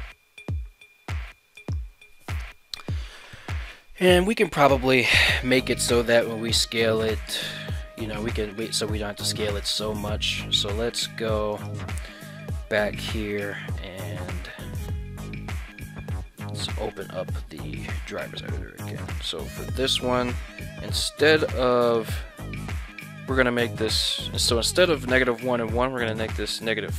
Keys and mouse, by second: 1.6 right click, 5.9 s, 6.0 x, 9.6 right click, 10.9 ctrl+Tab, 11.6 right click, 16.9-18.1 right drag.